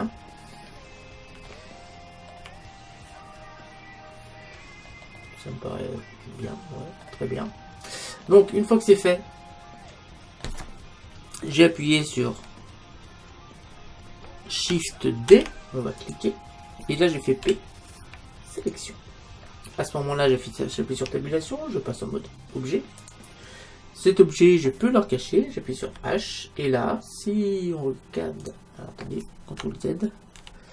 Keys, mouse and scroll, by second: 8.3-10.2 middle drag, 15.4 shift+d, 16.2-17.9 drag, 17.5 p, 21.0 Tab, 25.9 h, 28.5-30.2 right drag, 30.5 ctrl+z.